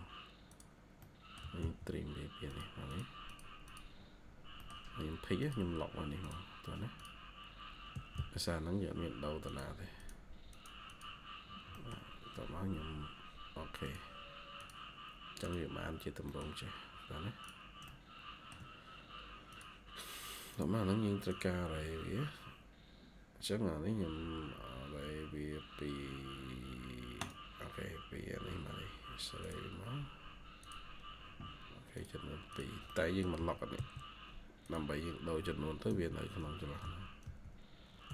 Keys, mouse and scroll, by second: 0.9 middle click, 1.3-2.6 typing, 1.6 scroll up 1, 2.8 double click, 3.9 scroll down 1, 4.5 middle click, 4.6 scroll down 1, 7.4-7.8 scroll up 1, 8.2 scroll up 1, 8.7-9.4 typing, 10.8 double click, 11.1 scroll down 1, 11.6 middle click, 16.2 middle click, 16.5 scroll up 1, 32.8 middle click, 35.8-38.1 typing, 36.7 Tab, 37.6 scroll up 1.